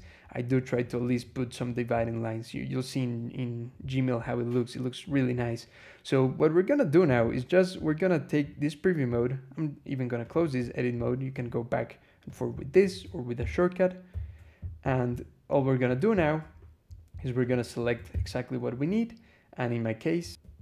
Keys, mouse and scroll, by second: 0.6 click, 1.4 click, 1.9 scroll up 1, 4.1-4.4 scroll up 1, 7.0 click, 10.1 click, 11.2 click, 12.1 click, 12.6 click, 13.2 ctrl+e, 15.4-15.9 drag, 16.1-16.7 scroll down 4, 17.0 shift+scroll down 2, 17.3 shift+click, 17.9 ctrl+c, 20.3 e.